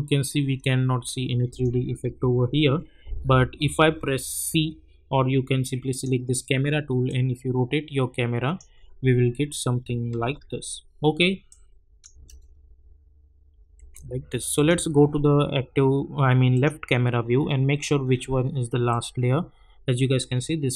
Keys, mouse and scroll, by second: 1.5 click, 2.1 u, 2.7 scroll up 1, 5.9-10.1 drag, 10.1 ctrl+z, 11.5 click, 12.1 space, 14.5 click, 17.3-17.7 scroll down 1, 18.9 click.